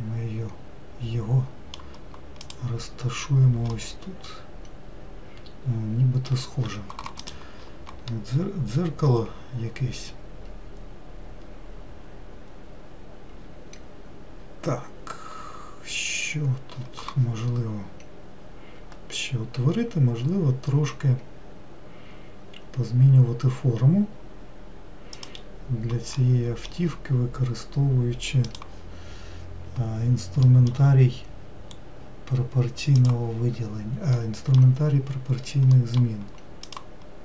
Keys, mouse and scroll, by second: 0.5-3.1 middle drag, 3.1 click, 3.8-4.2 scroll down 1, 4.3-25.8 middle drag, 25.8 click, 26.7-33.5 middle drag, 33.5 click, 34.7-37.2 middle drag.